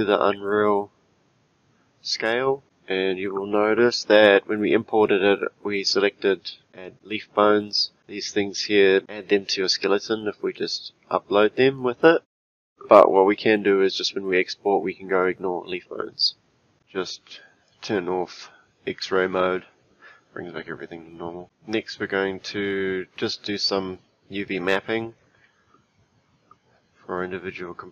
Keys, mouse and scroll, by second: 0.3-2.6 scroll down 2, 2.9-4.0 scroll up 5, 4.0-6.7 shift+middle drag, 10.5-13.6 shift+middle drag, 17.7-20.7 drag.